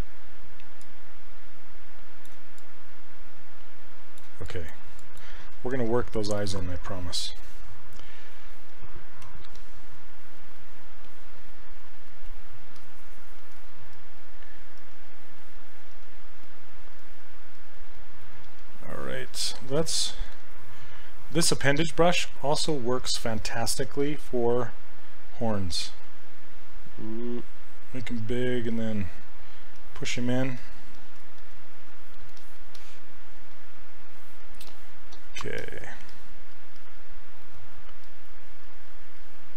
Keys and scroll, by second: 9.3 q.